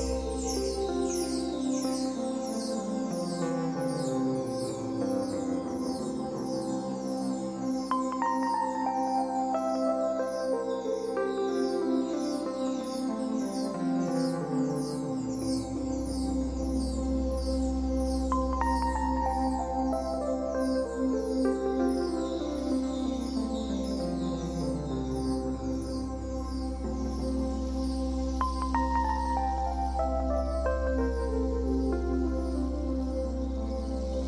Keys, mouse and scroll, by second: 0.8-4.8 drag, 4.8-6.0 middle drag, 6.0-9.0 drag, 9.0-10.9 middle drag, 9.8-10.9 scroll up 2, 10.9-15.0 drag, 14.8 scroll down 2, 15.0-18.8 middle drag, 17.2-17.5 scroll up 2, 17.7-18.8 scroll up 2, 18.8-23.6 drag, 23.0-23.6 scroll down 2, 23.6-27.5 shift+middle drag, 23.9-24.2 scroll up 2, 25.3-25.9 scroll up 2, 25.9-27.5 scroll up 1, 27.5-30.8 drag, 30.6 scroll down 2, 30.8-32.7 middle drag, 31.2 scroll up 2, 32.7-34.2 drag.